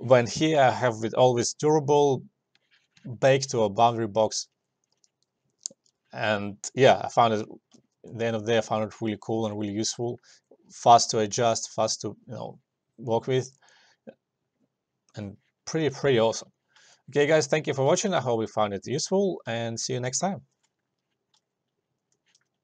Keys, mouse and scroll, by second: 7.9 alt+middle click, 8.2-11.1 alt+drag, 16.8 alt+click, 17.1-19.6 alt+drag, 19.6 alt+middle click, 19.9 alt+click.